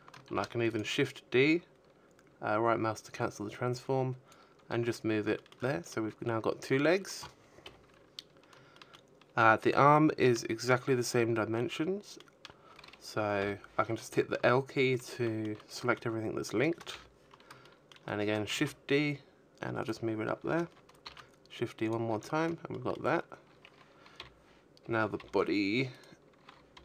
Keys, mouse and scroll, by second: 0.3 click, 2.1 a, 2.6 shift+middle click, 2.9 middle click, 3.3 z, 4.9 KP_1, 6.0 shift+middle click, 6.0-6.5 scroll up 1, 8.4 shift+middle click, 12.2 l, 12.5 shift+middle click, 13.0 middle click, 14.2 KP_1, 14.9 shift+middle click, 15.8 shift+d, 17.2 click, 18.3 shift+d, 19.4 click, 19.4 a, 20.0 shift+middle click, 21.5 l, 22.5 l, 23.2 right click, 24.1 l, 25.8 click.